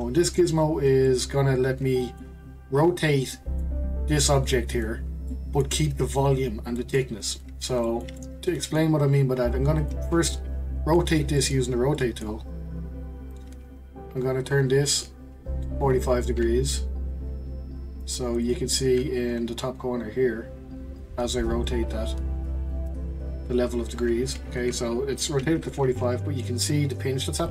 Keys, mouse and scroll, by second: 9.8 click, 10.3-13.3 middle drag, 13.3 click, 18.4 ctrl+click, 21.6 click, 25.4 ctrl+z, 25.9-27.5 middle drag.